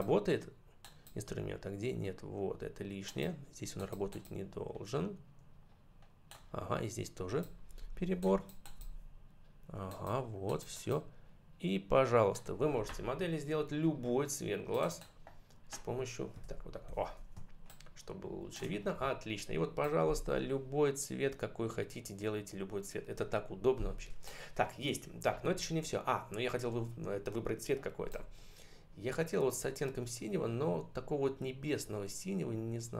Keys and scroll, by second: 16.3 ctrl+-, 17.3 space.